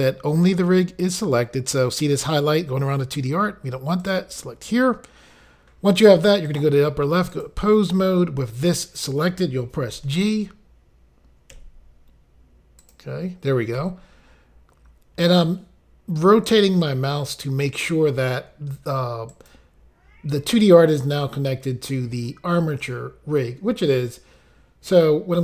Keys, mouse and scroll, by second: 4.0 click, 6.5 click, 7.3 click, 12.8 click, 13.8 g, 19.3 right click.